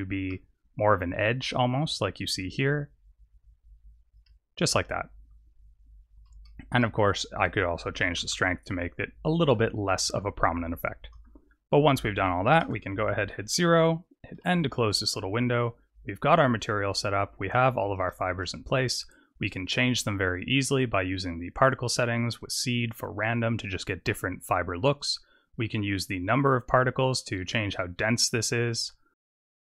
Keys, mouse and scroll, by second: 0.4-1.3 scroll up 5, 2.3 shift+click, 4.5-4.9 scroll down 3, 6.0 scroll down 15, 6.7 shift+middle click, 8.9 click, 10.3 click, 11.0 KP_0, 12.0-12.5 scroll down 4, 12.5 KP_0, 14.7 n, 16.7 click, 17.4 scroll down 4, 18.0 shift+middle click, 18.5-19.7 scroll up 2, 20.0 click, 21.0 click, 22.5 click, 23.0 click, 23.5 click, 24.9 click, 25.7 click, 26.5 click, 28.7 click.